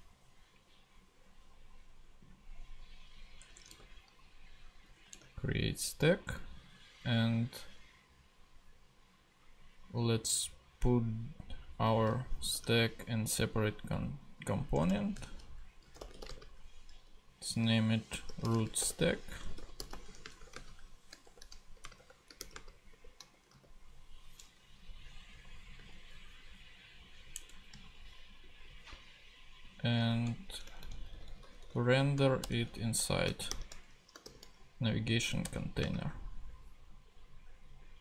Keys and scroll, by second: 3.4 Return, 5.0 super+BackSpace, 5.1 super+Tab, 11.9 super+c, 12.5 super+Tab, 14.7 Return, 15.6-16.7 typing, 18.0-23.4 typing, 23.5 super+v, 24.8 Down, 25.8 ;, 27.4 BackSpace, 27.7 ,, 30.4 alt+shift+Right, 32.4 alt+shift+Return, 33.5 shift+,, 34.2 shift+r, 35.4 shift+Return, 35.8 space, 36.0 /.